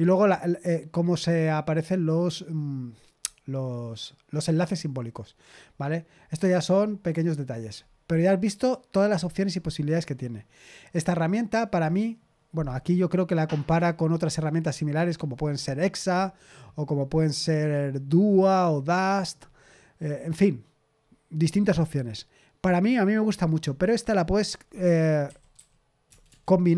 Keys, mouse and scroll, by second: 3.1 scroll down 1, 3.2-5.1 scroll up 1, 5.1-10.7 scroll down 1, 10.7-11.2 scroll down 1, 17.4-18.2 scroll down 1, 18.2-19.3 scroll down 1, 19.3-22.7 scroll down 1, 22.7-23.7 scroll down 1, 25.2-26.2 typing.